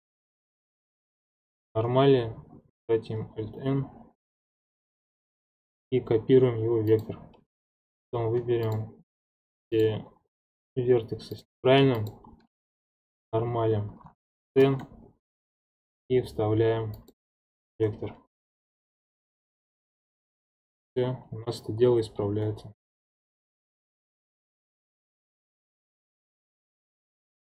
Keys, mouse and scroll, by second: 7.9 click, 8.6 shift+click, 9.2 shift+click, 9.7 shift+click, 10.4 shift+click, 11.3 shift+click, 12.0 shift+click, 14.6 alt+n, 17.1 alt+n, 18.4 ctrl+Tab, 19.0 ctrl+Tab, 19.4-20.6 scroll up 6, 19.9-22.8 middle drag, 22.8-23.5 scroll down 11, 23.5-26.0 shift+middle drag.